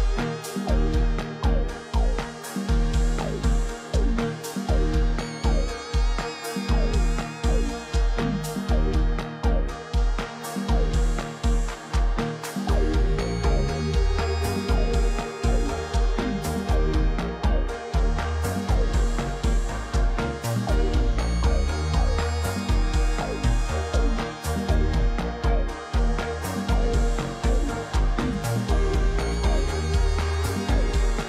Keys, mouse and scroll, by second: 2.8 double click, 8.1 ctrl+t, 22.4 ctrl+z.